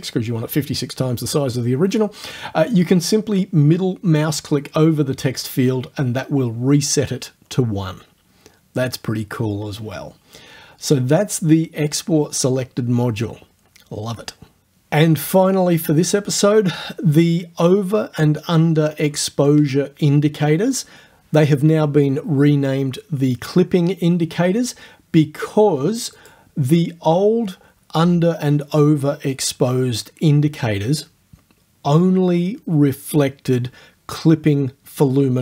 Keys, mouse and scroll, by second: 5.4 click, 26.2 click.